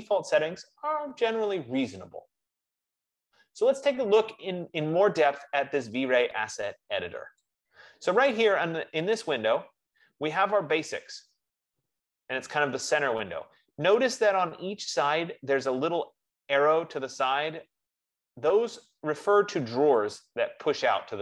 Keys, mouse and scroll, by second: 4.7 F15, 8.7-12.4 drag, 20.4 click.